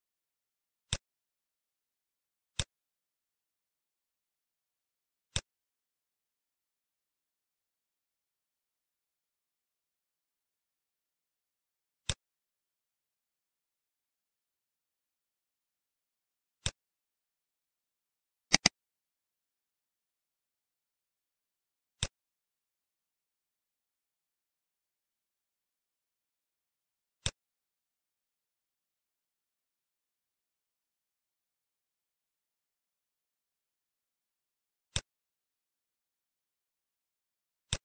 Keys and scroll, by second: 4.4 ctrl+c, 20.3 ctrl+v.